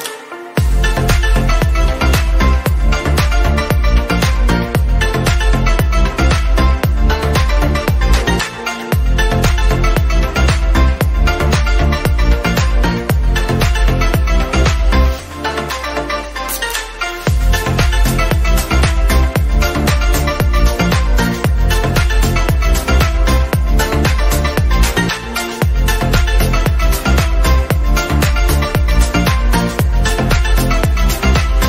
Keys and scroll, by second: 14.7 ctrl+0.